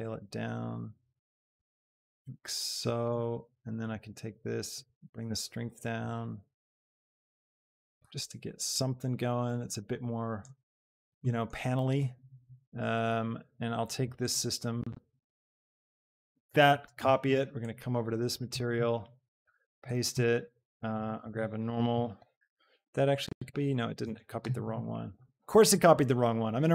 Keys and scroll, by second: 16.8 ctrl+c, 20.9 ctrl+shift+v, 21.2 shift+a, 22.0 n, 22.3 r, 24.2 Escape.